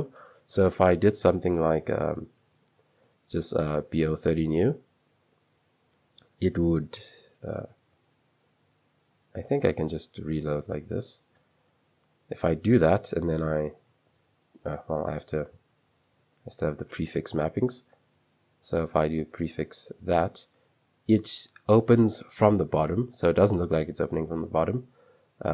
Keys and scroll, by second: 1.3-3.9 typing, 3.2 Escape, 4.0 Return, 4.7 super+3, 9.9 space, 9.9 shift+r, 13.9 shift+', 15.1 ;, 16.2 Escape, 18.8-19.6 typing.